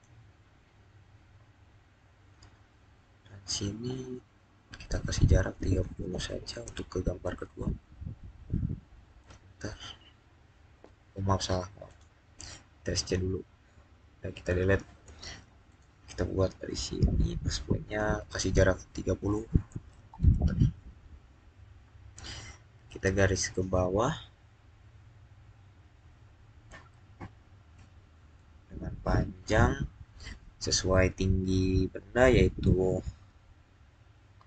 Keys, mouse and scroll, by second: 5.4 3, 6.5 0, 9.1 Return, 11.7 Return, 15.5 click, 18.9-19.6 typing, 19.9 Return, 27.0 scroll down 1, 27.6-30.4 middle drag.